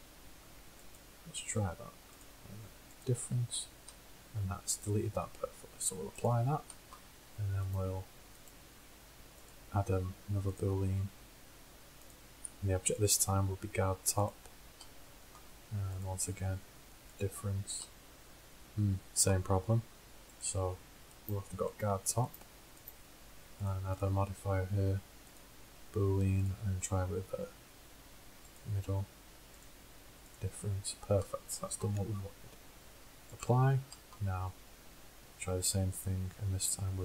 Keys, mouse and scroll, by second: 0.2-1.7 drag, 2.3-4.1 drag, 4.1-5.2 middle drag, 5.2-7.7 drag, 7.7-9.1 middle drag, 9.1-9.5 drag, 9.5-10.3 middle drag, 10.3-11.4 drag, 13.1-17.7 drag, 20.5-21.2 drag, 22.3-23.7 drag, 24.7-25.7 drag, 31.0-31.4 drag, 33.5 click, 35.1-35.7 middle drag, 36.1-37.0 drag.